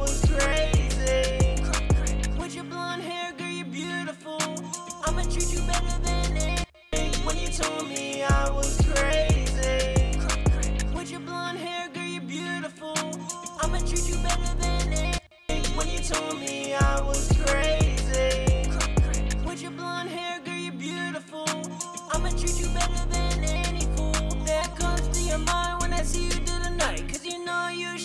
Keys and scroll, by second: 1.5 typing, 11.1 typing, 12.8-13.3 typing, 25.8 super+`.